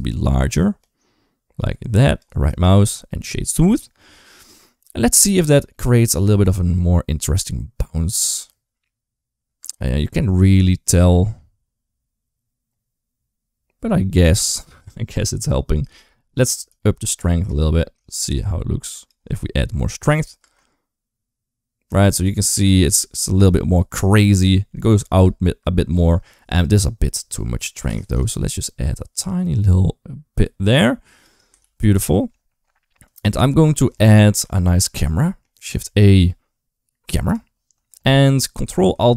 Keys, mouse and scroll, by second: 2.4-3.3 right drag, 3.8-4.3 middle drag, 5.1 click, 5.5-6.0 middle drag, 6.0 space, 9.4 space, 10.7-14.3 drag, 16.5 shift+click, 17.9-18.9 shift+drag, 20.2 space, 25.0 space, 26.5-27.7 shift+drag, 28.1-31.1 shift+drag, 32.0 ctrl+s, 33.3-33.7 middle drag, 33.8 shift+middle drag, 34.7 shift+middle drag, 35.0 middle click, 35.6 shift+a.